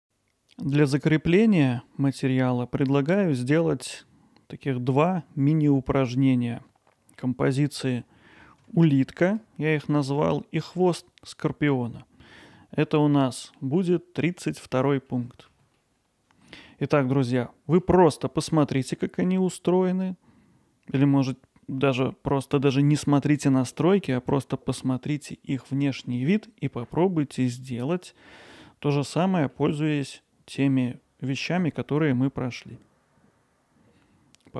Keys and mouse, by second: 7.8-8.6 middle drag, 8.8-9.3 ctrl+alt+middle drag, 10.0 middle drag, 12.4 middle click, 12.8 alt+middle click, 13.1-13.6 middle drag, 15.1-15.5 middle drag, 15.8-16.5 ctrl+alt+middle drag, 16.7 middle click, 17.8-18.5 alt+middle drag, 20.9 middle drag, 29.5-30.1 middle drag.